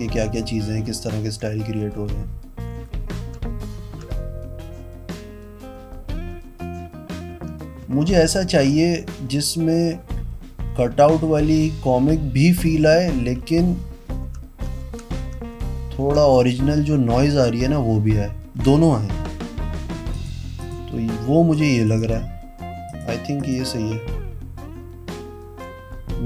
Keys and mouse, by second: 0.0-4.2 typing, 6.5 shift+=, 7.5 shift+=, 8.0 shift+=, 8.9 shift+-, 9.4 shift+=, 10.9 shift+-, 11.5 shift+=, 13.2-16.7 typing, 20.3 click, 20.8 click, 21.7 click, 22.0 click, 23.1 click, 23.6 click.